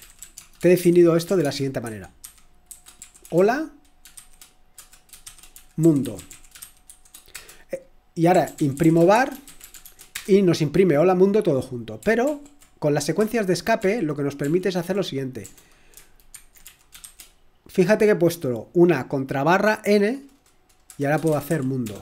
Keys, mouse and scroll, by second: 0.0-10.3 typing, 12.2 ctrl+p, 13.8 ctrl+p, 14.2-17.0 typing, 18.4 typing, 19.7 typing, 21.0 Return, 21.0-22.0 typing.